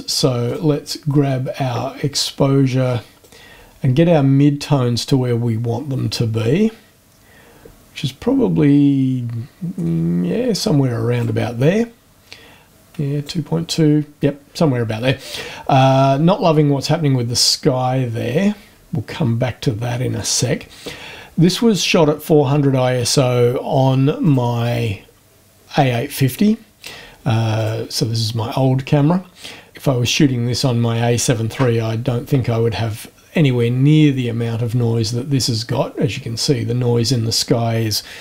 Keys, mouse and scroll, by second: 0.4 click, 3.2-11.4 drag, 12.6 click, 24.2 click, 26.3 click, 27.6 click, 33.2-34.7 scroll up 4.